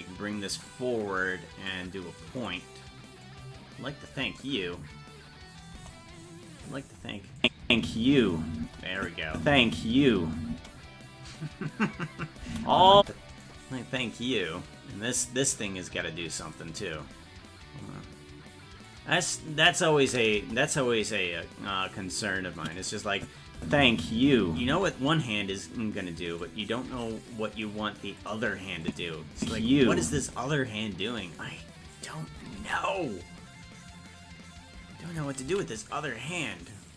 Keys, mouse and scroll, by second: 1.7 click, 3.2 click, 5.7 KP_0, 7.4 click, 7.6 space, 9.0 click, 9.3 space, 12.4 space, 13.4 right click, 14.2-15.4 drag, 17.8-18.9 drag, 20.4 KP_0, 22.6 click, 23.2 click, 23.6 space, 26.3 right click, 26.9 g, 28.8 click, 29.3 space, 33.0 ctrl+s, 35.9 ctrl+s.